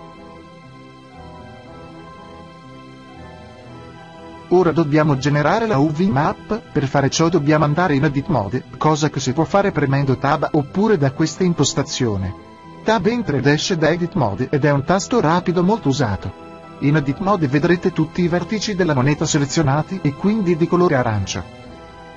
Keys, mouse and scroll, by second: 2.4-4.1 drag, 4.1-6.5 middle drag, 9.5 Tab.